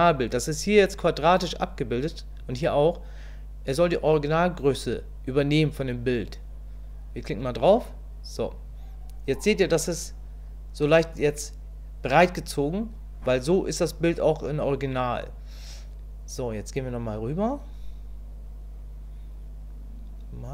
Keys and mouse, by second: 17.3-20.5 drag.